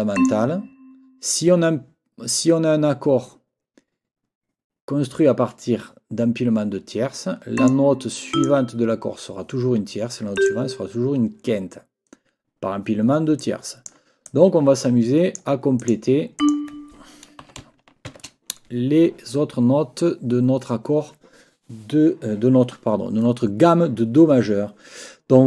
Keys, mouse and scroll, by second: 0.2 click, 7.6 click, 8.3 click, 10.4 click, 13.4 click, 14.2-15.5 drag, 15.8 click, 16.4 click, 17.4 n.